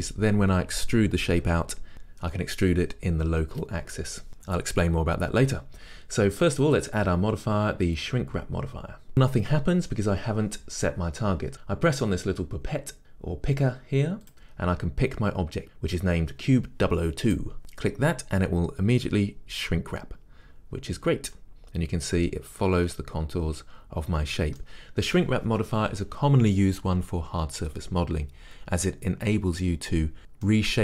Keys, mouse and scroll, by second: 21.5-30.8 middle drag.